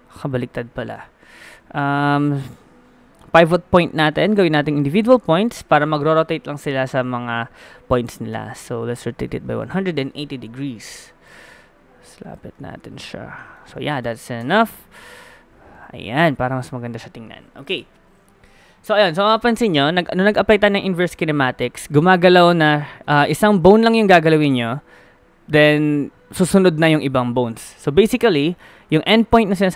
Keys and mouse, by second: 1.0 KP_7, 5.2-7.1 middle drag, 8.3 r, 11.3 click, 12.5 middle click, 12.7 click, 13.0-14.0 middle drag, 14.4 Tab, 14.9 middle click, 16.2 g, 17.8 KP_1, 18.6 middle click, 19.2 ctrl+z, 21.7 g.